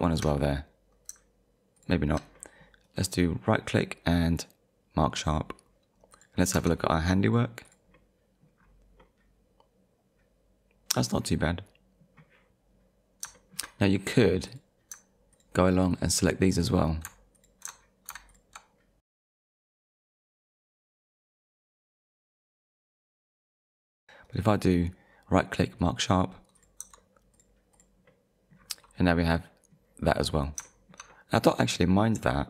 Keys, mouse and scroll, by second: 0.0 shift+click, 1.8 shift+click, 2.4 middle click, 2.8 right click, 5.3 click, 6.1 click, 6.6 Tab, 7.3 click, 7.9 middle click, 8.6 scroll down 1, 9.7 middle click, 12.8-13.2 scroll up 1, 13.4 shift+middle click, 14.5 click, 15.3 shift+click, 15.9 shift+click, 16.5 shift+click, 17.4 ctrl+click, 18.3 ctrl+click, 18.8 scroll up 1, 19.1 ctrl+click, 19.4 ctrl+click, 19.9 ctrl+click, 20.4 ctrl+click, 20.5 shift+middle click, 20.6 scroll up 1, 20.8 ctrl+click, 21.0 ctrl+click, 21.2 ctrl+click, 21.3 middle click, 21.4 shift+middle click, 21.6 ctrl+click, 21.9 ctrl+click, 22.1-22.5 scroll down 3, 22.3 ctrl+click, 22.5 shift+middle click, 22.7 middle click, 22.9 shift+middle click, 23.9 middle click, 25.8 click, 26.6 click, 26.8 Tab, 27.3 click, 28.1 middle click, 28.6 scroll down 1, 29.0 scroll up 1, 30.7 shift+middle click, 32.1 middle click.